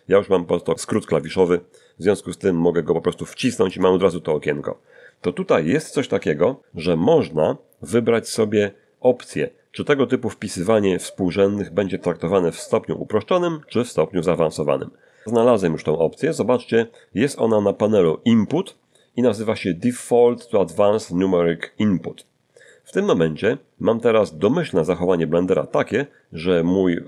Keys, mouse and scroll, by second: 3.7 click.